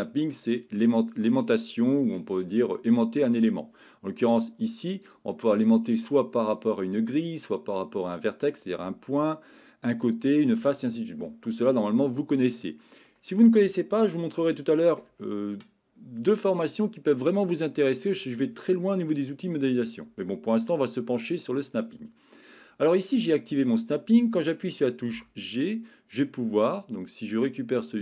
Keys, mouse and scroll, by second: 5.2-12.4 drag, 12.4-13.3 middle drag, 14.6 shift+middle click, 17.7 middle click, 25.1 g.